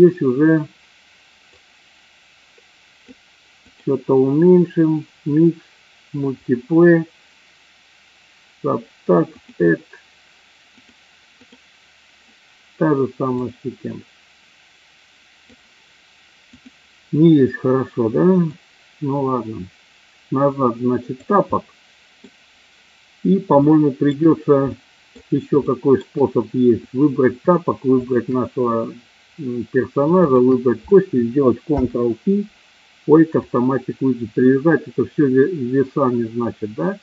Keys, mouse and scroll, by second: 1.6-3.3 drag, 3.7-9.5 drag, 10.8-11.7 drag, 13.2-15.5 drag, 16.5 click, 18.5-21.1 drag, 21.6-22.2 middle drag, 23.5 shift+scroll up 1, 23.7 shift+middle click, 24.6 scroll up 1, 24.9 middle click, 25.6-26.0 shift+middle drag, 27.9 shift+click, 30.1 shift+click, 31.6 ctrl+p.